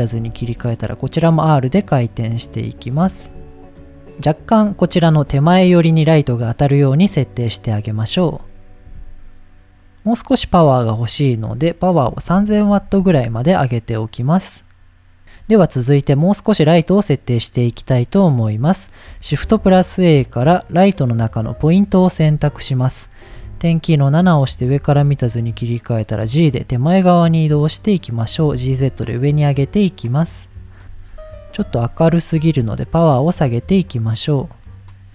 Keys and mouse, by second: 0.3 r, 2.0 click, 3.1 r, 3.7 r, 7.8 middle click, 8.8 KP_0, 11.2-13.8 drag, 12.5 KP_0, 17.2-17.5 middle drag, 19.3 shift+a, 23.3 KP_7, 24.8 g, 27.2 click, 27.8 middle click, 28.5 g, 28.6 z, 30.0 click, 30.4 middle drag, 30.8 KP_7, 31.8 click, 31.8 g, 32.8-35.1 drag.